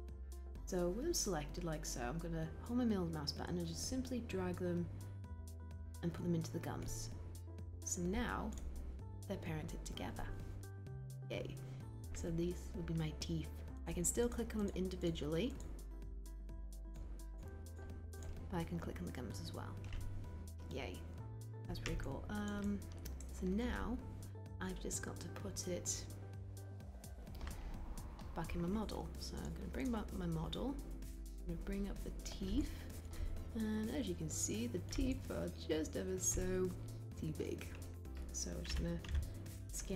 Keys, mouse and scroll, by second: 2.8 middle click, 38.8 r.